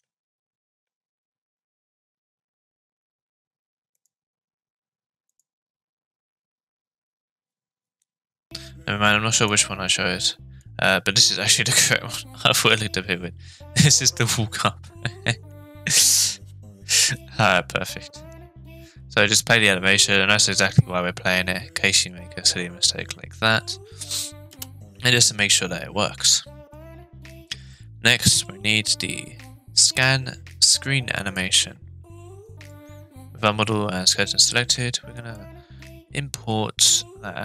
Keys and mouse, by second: 9.4-10.6 drag, 11.6 space, 24.5 space, 25.1-26.7 drag, 31.4 click, 32.7-34.2 drag, 34.8 click.